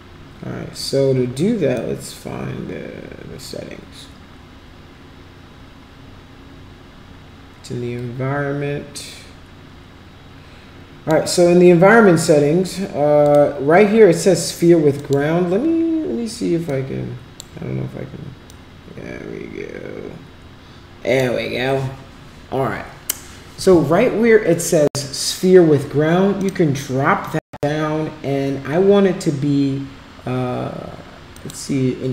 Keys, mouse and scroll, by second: 1.8-11.1 drag, 13.2 click, 15.0 click, 16.7-17.4 drag, 18.5-21.2 drag, 31.4 click.